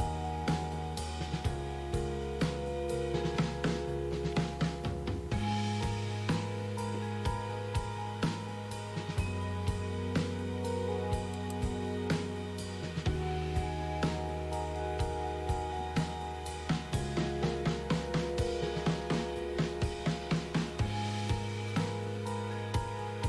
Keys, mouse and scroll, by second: 11.4 click.